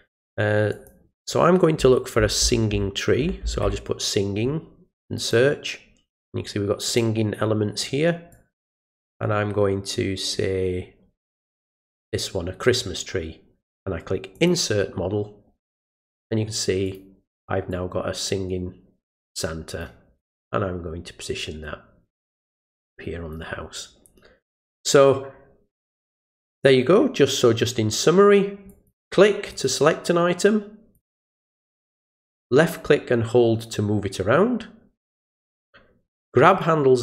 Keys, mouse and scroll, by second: 0.7 click, 5.2 click, 6.9 click, 8.3 click, 11.7 click, 14.3 click, 16.8 click, 17.7-19.8 drag, 20.2-23.3 drag, 28.7 click, 29.5 click, 30.9-35.6 drag, 36.6-37.0 drag.